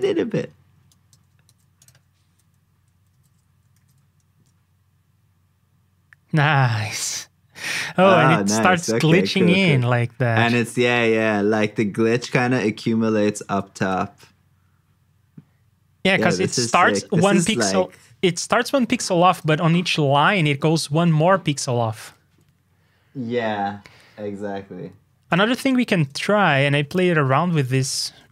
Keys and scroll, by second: 1.4 super+c, 3.1 ctrl+c, 3.8 super+v.